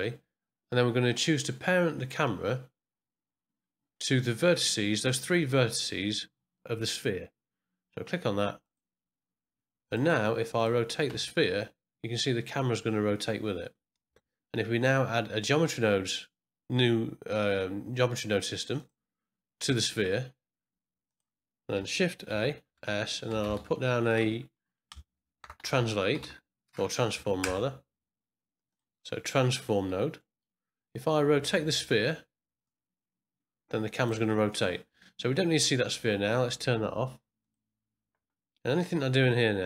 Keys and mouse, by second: 10.5 click, 11.1 r, 18.7 click, 21.0 click, 22.2 shift+a, 25.1 BackSpace, 25.4 BackSpace, 29.6 middle click, 30.2 middle click, 32.6-34.1 drag, 37.4 click, 38.9-39.6 drag.